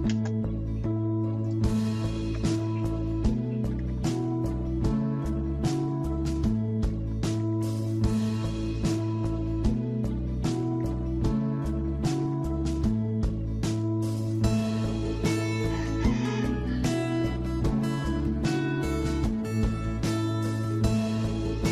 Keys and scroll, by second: 0.0-0.4 typing, 1.9-2.7 typing, 3.8 alt+Tab, 7.0 alt+Tab, 7.4 alt+Tab, 10.8 alt+Tab, 12.1 alt+Tab.